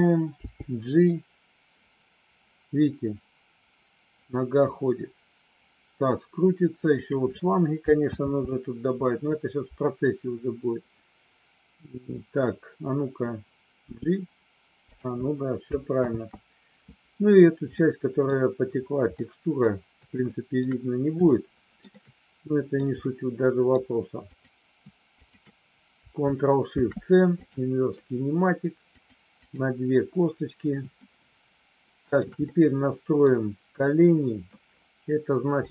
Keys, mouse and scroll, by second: 0.3 g, 8.2 ctrl+z, 13.8 g, 16.1 ctrl+z, 17.8 middle click, 19.2 middle click, 20.2 shift+middle click, 21.3-22.8 shift+middle drag, 23.0 middle click, 24.2 click, 25.1 shift+click, 27.4 ctrl+shift+c, 29.1 click, 29.3 click, 31.0-32.1 shift+middle drag, 32.4 middle click.